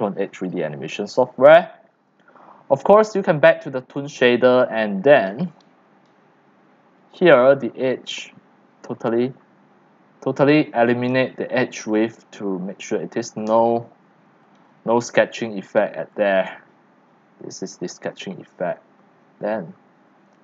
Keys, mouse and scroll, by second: 0.0-1.6 typing, 0.3 click, 0.7 middle click, 2.2-4.2 drag, 7.0 click, 7.6-8.4 drag, 10.5-13.7 drag, 13.7 scroll up 1, 14.0 right click, 14.4 x, 15.1 c, 15.3-16.8 drag.